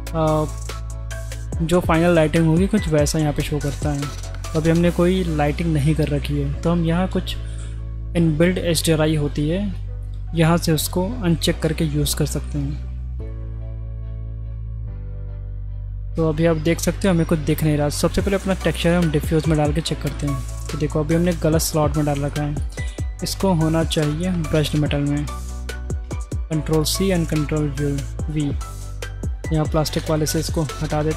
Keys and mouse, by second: 0.4-13.4 drag, 13.8-14.9 middle drag, 16.0 middle click, 18.0-19.2 drag, 20.1-21.4 middle drag, 22.6 click, 23.2 ctrl+c, 24.2 click, 24.7 click, 26.0 ctrl+v, 26.9 click, 27.7-28.3 drag, 30.1 click, 30.5 Delete.